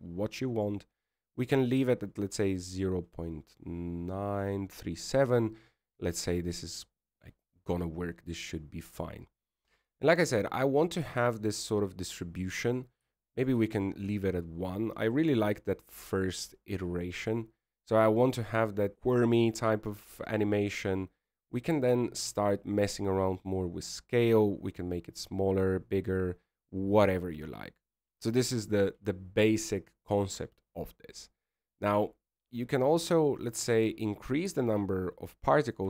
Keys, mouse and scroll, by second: 3.0 click, 14.5 click, 23.6-24.9 scroll down 3, 24.9 click, 24.9-25.8 scroll down 3, 32.5-33.2 scroll down 3, 33.2 scroll down 4, 35.6-35.8 scroll up 4.